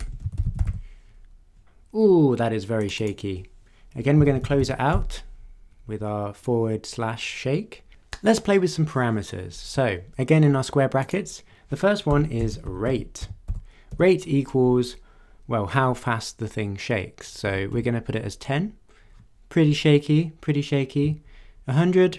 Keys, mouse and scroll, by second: 0.0-1.1 typing, 2.8 click, 3.9-5.4 typing, 11.1 click, 12.1 Left, 12.4-14.4 typing, 17.4 1, 17.7 0, 21.0 0.